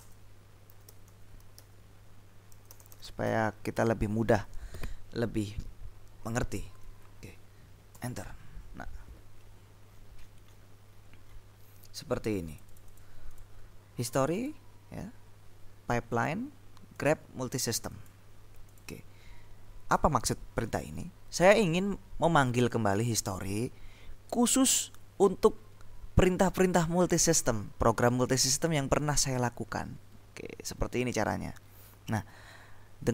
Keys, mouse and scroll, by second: 0.0-3.8 typing, 8.0 Return, 9.9-11.3 scroll up 2, 11.3 scroll down 2, 12.6-13.9 drag, 14.3 click, 16.2 click, 17.1 click, 17.7 click, 18.9 click, 30.2-32.2 scroll down 2, 32.2-33.1 scroll down 1.